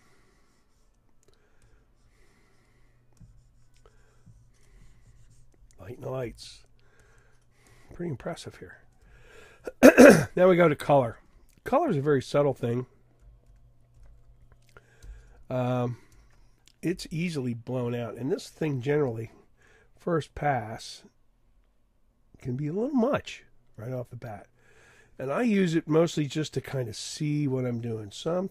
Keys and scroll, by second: 13.5 super+=, 17.6 [.